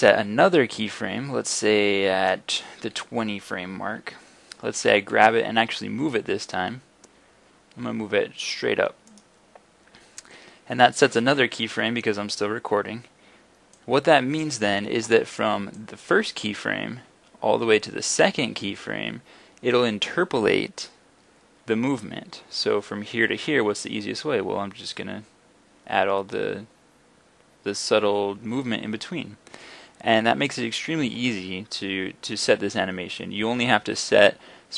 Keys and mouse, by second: 5.1 g, 9.2-17.8 drag.